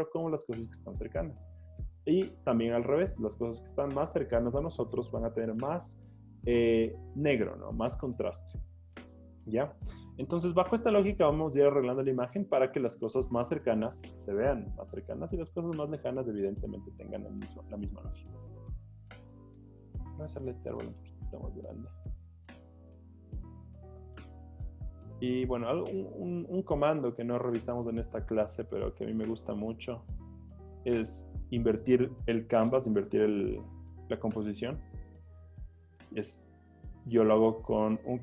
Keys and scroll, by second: 17.4-20.3 typing, 21.7 Escape, 25.0 space, 25.1 t, 27.1 Escape, 27.4 Escape, 27.5 Escape, 28.3 super+t, 31.0 Return, 33.2 super+o.